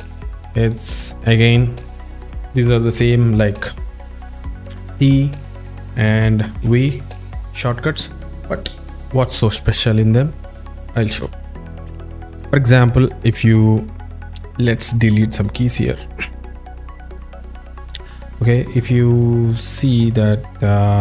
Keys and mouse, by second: 4.8 t, 6.6 v, 7.9 click, 12.2 click, 14.4 click, 14.7 click, 15.9 Delete, 17.4 drag, 17.8 click, 18.4 click, 20.1-21.0 drag.